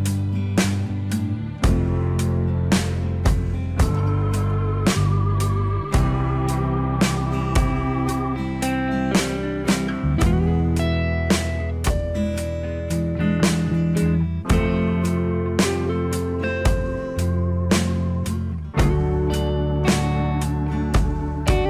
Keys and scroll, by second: 19.1 alt+w.